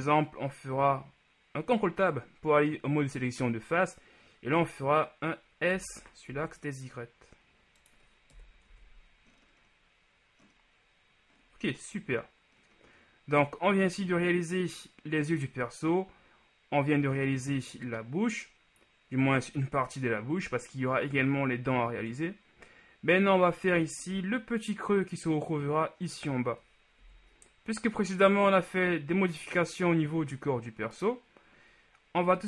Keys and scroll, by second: 6.1 s, 6.5 y, 8.4 KP_1, 8.8 Tab, 27.2 KP_1.